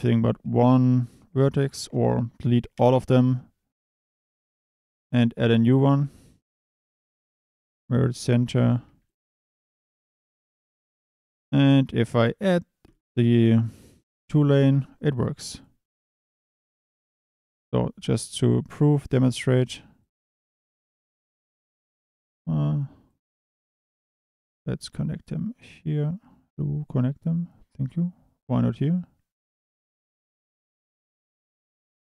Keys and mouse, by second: 0.4 a, 2.0 a, 2.7 Delete, 4.1 a, 6.0 shift+a, 7.6-11.0 typing, 8.6 click, 9.0 click, 9.7 click, 10.7 click, 12.0 click, 16.1 KP_7, 17.5 shift+d, 18.1 click, 18.3 e, 18.9 e, 21.6 click, 23.1 click, 24.2 click, 24.4 g.